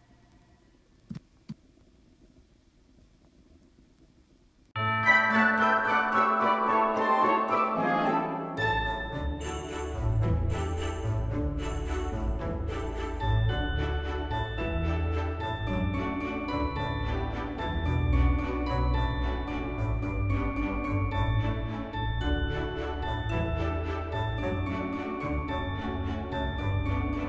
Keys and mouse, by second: 0.1 Tab, 0.5 click, 1.4 Tab, 1.5 click, 1.9 Tab, 2.6 shift+middle click, 3.4 click, 4.0 alt+shift+click, 4.9 alt+shift+click, 5.5 alt+z, 6.2 alt+shift+click, 8.0 alt+shift+click, 8.5 alt+z, 9.8 click, 12.2 g, 12.5 z, 14.3 click, 15.8 click, 16.2 alt+shift+click, 17.9 alt+z, 18.5 alt+shift+click, 19.7 alt+z, 20.4 g, 20.7 z, 22.6 right click, 22.7 g, 22.9 z, 24.4 right click, 24.8 g, 25.0 z, 26.4 click.